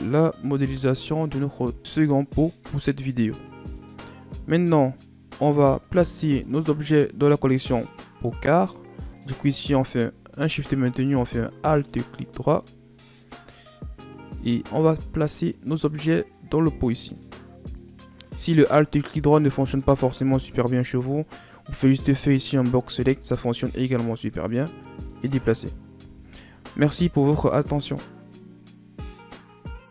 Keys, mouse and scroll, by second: 0.1 scroll down 1, 0.3-3.2 middle drag, 3.4-5.7 scroll down 8, 5.7 click, 11.6 shift+click, 14.5 click, 17.6 click, 18.9 click, 19.4-20.8 scroll down 11, 20.8 click, 22.8 b, 26.0 KP_1, 27.2-29.9 middle drag.